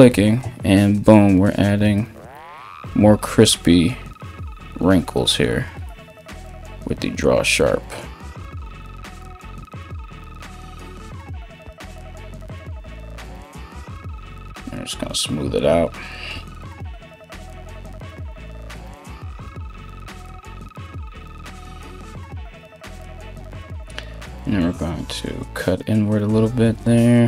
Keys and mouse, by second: 13.3 shift+', 18.8 [, 18.9 [, 19.0 [.